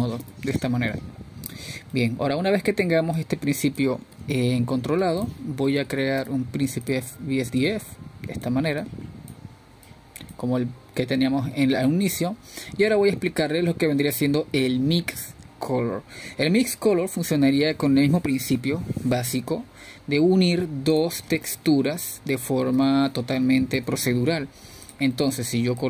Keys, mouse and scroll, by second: 10.9-11.7 drag, 12.0-12.6 drag, 13.2 click, 15.3-25.8 drag.